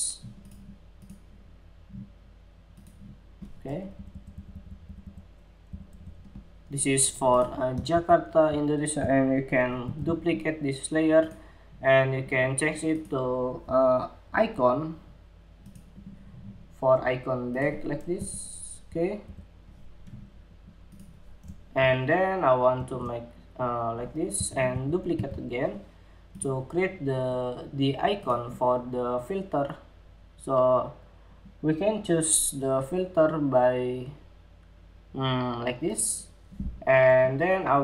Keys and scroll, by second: 7.4 super+c, 9.4 super+v, 24.2 super+c, 24.7 super+v, 26.0 super+v.